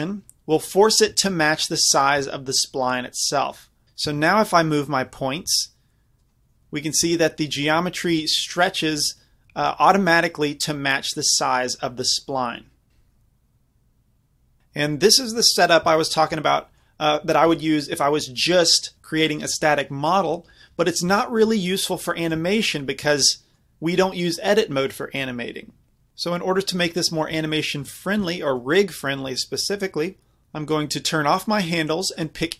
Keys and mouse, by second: 1.1 z, 2.0-3.8 middle drag, 2.2 z, 3.8 ctrl+z, 4.2 Tab, 4.7-6.6 drag, 5.5 g, 7.3-10.0 middle drag, 8.1 g, 12.9 ctrl+z, 18.0-22.3 middle drag, 22.3-23.7 drag, 28.6-31.4 middle drag, 31.4-32.5 drag.